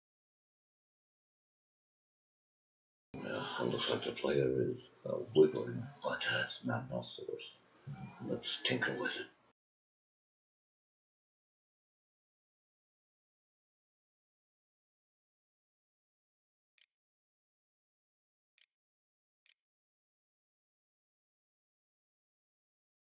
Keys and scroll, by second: 15.6-18.2 typing, 18.8 ctrl+z, 18.9 ctrl+s, 19.5-20.3 typing.